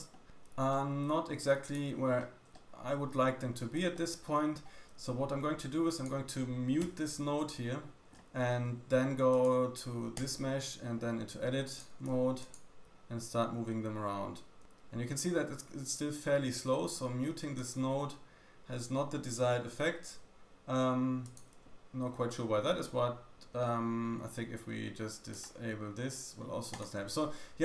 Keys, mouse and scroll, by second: 2.2 middle click, 2.2-2.8 scroll down 2, 2.5 shift+middle click, 3.4 scroll up 1, 3.9 shift+middle click, 6.0 click, 7.6 m, 8.1 middle click, 8.1-8.5 scroll down 2, 8.5-9.1 scroll up 2, 9.3 click, 11.0 Tab, 11.7 click, 11.7 middle click, 11.7 right click, 12.1 shift+click, 12.4 shift+middle click, 12.4 shift+right click, 12.8 g, 18.2 Tab, 18.2 click, 21.2 click, 21.6 shift+middle click, 25.3 click.